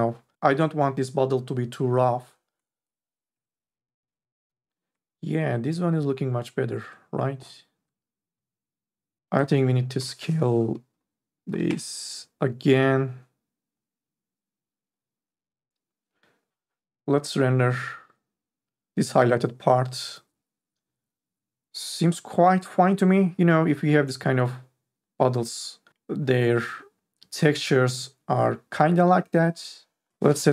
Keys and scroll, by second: 2.8 BackSpace, 3.1 KP_1, 3.3 Return, 10.0 BackSpace, 11.5 KP_2, 11.7 Return.